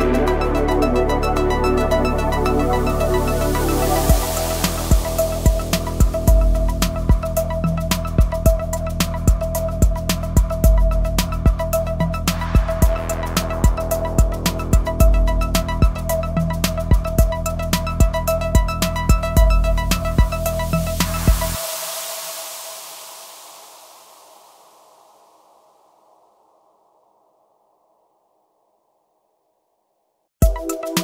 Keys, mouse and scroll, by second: 0.2 click, 1.6-2.0 typing, 2.0-4.5 drag, 4.7 typing, 5.0 click, 7.9 typing, 8.2-10.3 drag, 10.9 scroll down 1, 11.3 scroll up 1, 12.0 click, 12.1 typing, 13.7 scroll down 1, 14.8 scroll down 1, 15.0 scroll up 1, 15.2-16.4 typing, 16.7-23.3 drag, 23.3 scroll down 1, 23.9-27.5 drag, 29.0 scroll up 1, 29.7-30.1 typing, 30.3 click.